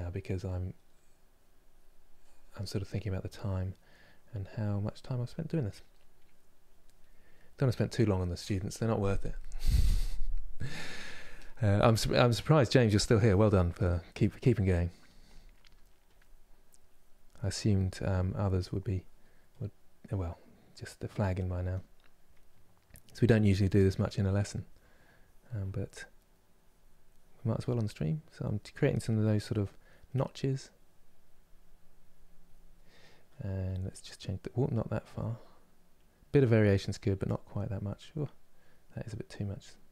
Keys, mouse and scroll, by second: 0.9-2.3 drag, 2.3 middle click, 3.0 click, 3.4-4.8 middle drag, 4.8 click, 5.6 middle click, 6.2 click, 6.6-15.7 middle drag, 15.7-39.9 drag.